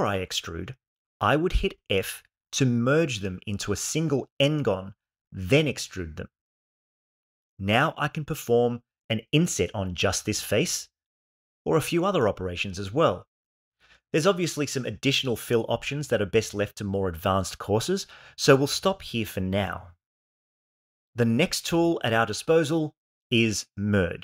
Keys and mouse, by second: 2.1 f, 3.9 e, 5.7 click, 7.3-8.3 shift+middle drag, 10.4 i, 13.3 e, 15.2 click.